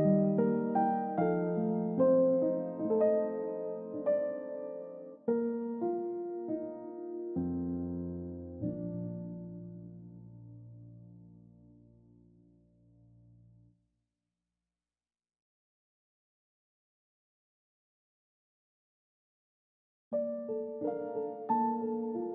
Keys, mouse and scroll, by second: 9.0-9.4 scroll up 1, 9.9 scroll down 1, 10.1 middle click, 16.5 middle click, 16.7 scroll up 1, 17.3 scroll down 1, 17.8 middle click, 18.0-18.6 scroll up 1, 19.6 middle click, 19.9 scroll up 1, 20.4 double click, 21.1 scroll down 1, 21.3-21.9 scroll up 1, 22.0 scroll down 1.